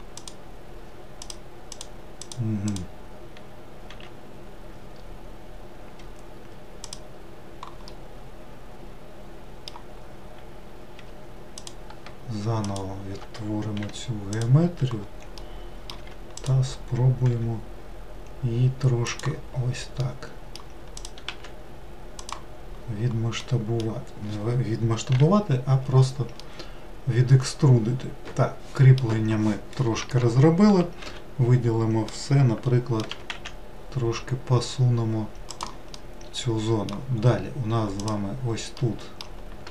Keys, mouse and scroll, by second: 0.2 click, 1.3 click, 1.8 click, 2.3 click, 2.7 click, 3.9 x, 8.0-11.0 middle drag, 11.0 2, 11.6 click, 12.7 shift+click, 13.8 f, 14.4 click, 15.4 middle click, 16.0 3, 16.4 click, 17.4 e, 19.6-20.1 scroll down 2, 20.1 middle click, 21.0 click, 21.3 e, 22.8-23.5 scroll down 2, 23.5-25.2 middle drag, 25.2 /, 26.4-29.6 middle drag, 32.1-33.2 middle drag, 33.2 g, 36.0-38.0 middle drag, 38.0 click, 38.8-39.7 middle drag.